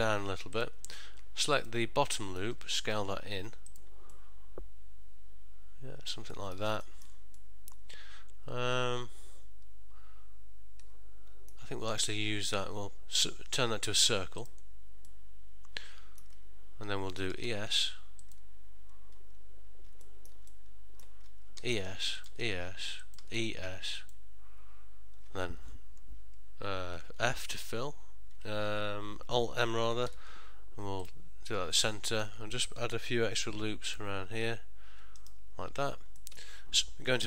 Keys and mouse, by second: 1.7 alt+click, 2.2 middle click, 3.0 s, 4.3 middle click, 6.5 ctrl+middle click, 6.9 shift+middle click, 7.5 middle click, 12.0 right click, 15.2 middle click, 17.5 e, 20.1 middle click, 20.6 ctrl+middle click, 21.7 e, 22.4 e, 23.6 e, 27.5 f, 30.2 alt+m, 32.0 middle click, 33.5 ctrl+r, 36.3 middle click.